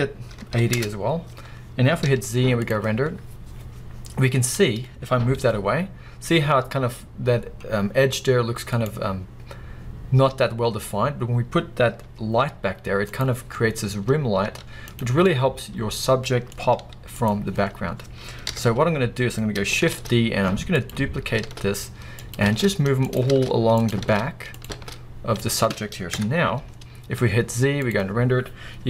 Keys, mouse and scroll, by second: 0.8 Return, 2.0 z, 5.4 g, 8.9 right click, 12.0 g, 13.4 click, 14.5 z, 15.3-17.3 middle drag, 16.8 g, 17.3 click, 18.4 KP_1, 19.1 scroll up 1, 19.9 shift+d, 20.8 click, 21.4 shift+d, 22.3 click, 22.5 shift+d, 23.2 click, 23.3 shift+d, 23.9 click, 24.0 shift+d, 24.6 click, 24.7 shift+d, 25.4 click, 26.1 KP_0, 27.2 z.